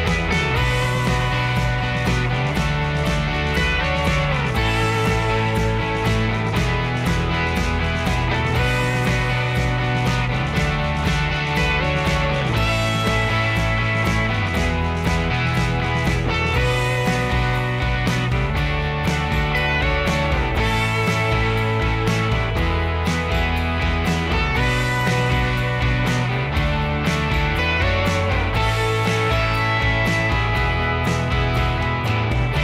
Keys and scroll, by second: 5.5-6.3 Escape, 9.2 b, 10.9 Escape, 11.3 ctrl+a, 11.8 ctrl+h, 13.1-13.5 typing, 17.5 Escape, 17.7 Escape.